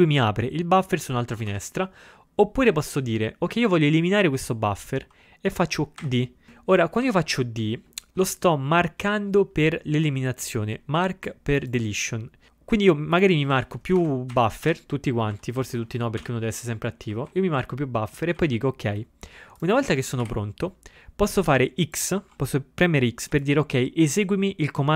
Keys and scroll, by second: 1.4 ctrl+x, 1.6 0, 4.2 ctrl+n, 6.1 d, 7.1 Up, 13.6 ctrl+a, 14.1 Up, 14.4 d, 14.7 d, 15.4 Up, 16.3 u, 17.1 Up, 17.3 Up, 18.4 Down, 18.5 Down.